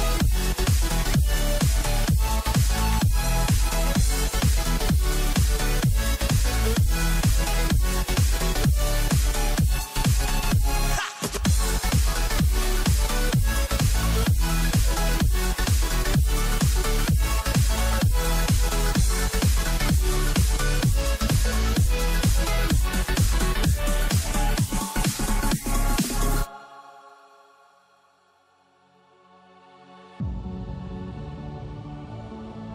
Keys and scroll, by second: 0.5 alt+space, 1.6 ctrl+alt+z, 3.7 ctrl+t, 7.0 ctrl+0, 13.6 ctrl+alt+z, 15.3 ctrl+=, 25.8 ctrl+space, 25.9 ctrl+alt+z.